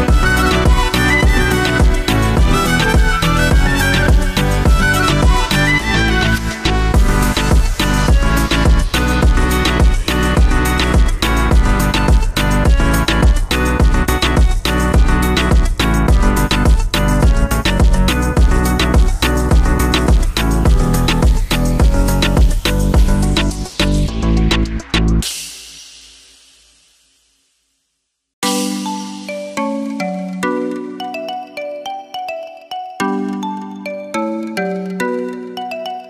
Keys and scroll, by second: 23.0 ctrl+Home.